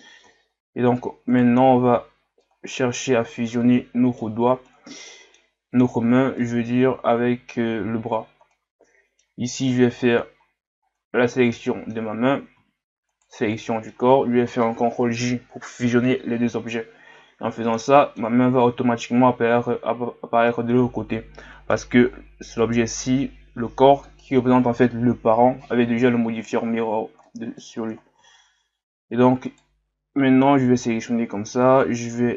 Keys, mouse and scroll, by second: 0.3-1.3 scroll up 4, 1.3 right click, 1.9 scroll down 2, 2.4-5.8 middle drag, 5.8-6.4 scroll up 3, 6.4-8.1 middle drag, 8.1 Tab, 8.5-10.5 middle drag, 10.5-11.0 scroll down 1, 11.0-13.1 middle drag, 13.1 shift+right click, 13.6-15.0 middle drag, 15.0 ctrl+j, 17.2-17.8 scroll down 3, 17.8-20.8 middle drag, 22.1-22.6 scroll up 2, 22.6 right click, 27.2 middle click, 27.8-28.6 scroll up 2, 28.7-29.1 scroll up 1, 29.1 Tab, 29.4 right click, 31.8 click.